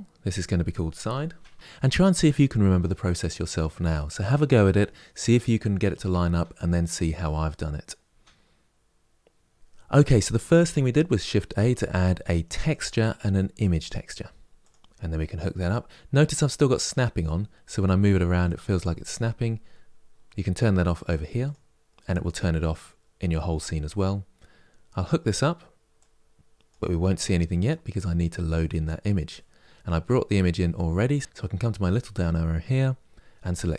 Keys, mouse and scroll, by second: 1.5-21.2 drag, 26.4 click, 32.0-33.7 drag.